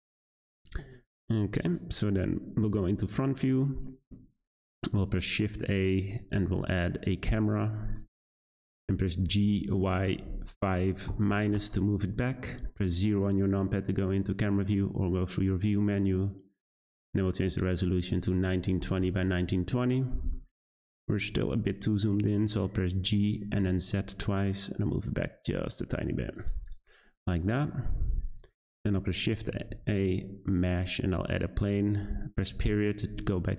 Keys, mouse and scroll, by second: 0.5 click, 1.1-2.2 middle drag, 2.2 `, 3.5-4.3 shift+middle drag, 4.3-5.0 scroll up 2, 5.0 shift+a, 8.0-8.4 middle drag, 8.4-9.2 scroll down 4, 9.2 g, 12.9 `, 17.0 click, 17.8-20.1 drag, 20.1-20.9 scroll down 3, 20.9-22.2 scroll up 1, 22.9 g, 26.6 click, 27.2-28.5 scroll up 1, 28.5 shift+a, 29.7 shift+a, 32.5 ..